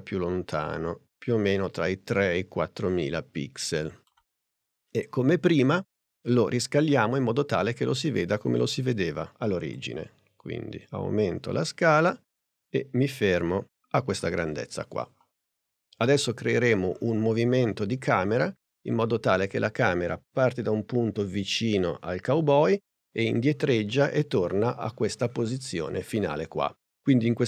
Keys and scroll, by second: 6.7 s.